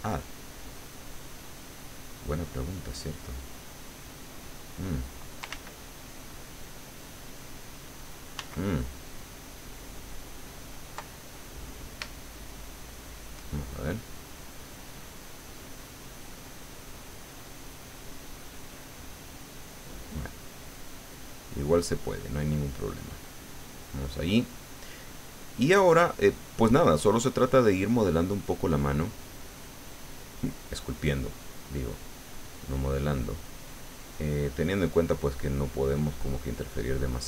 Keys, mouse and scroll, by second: 1.2-4.1 drag, 4.2 middle click, 5.5 ctrl+z, 8.4 ctrl+z, 12.1-13.4 shift+middle drag, 13.8-16.6 shift+drag, 16.6 middle click, 17.7-19.3 drag, 19.4-21.9 middle drag, 20.2 click, 22.0-23.6 drag, 23.8 click, 24.4 click, 25.0 click, 26.1 click, 26.6-28.1 middle drag, 28.1-28.5 scroll up 1, 28.5-29.7 drag, 29.8-32.0 drag, 31.1 middle click, 32.0 scroll up 1, 32.1-33.5 middle drag, 33.6-37.2 drag.